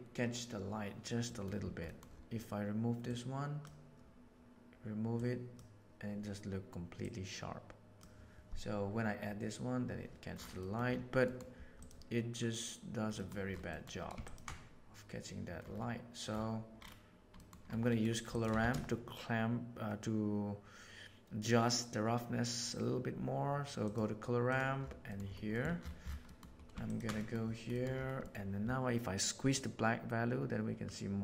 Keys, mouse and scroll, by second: 1.3 middle click, 3.0-3.6 drag, 5.1-5.5 drag, 6.9-7.9 drag, 10.6 middle click, 11.7 drag, 13.7 middle drag, 17.3 middle click, 17.8 middle click, 18.5 shift+a, 25.4 middle click, 26.8 ctrl+shift+click, 27.1 middle click, 27.6 middle click, 29.4-31.2 drag.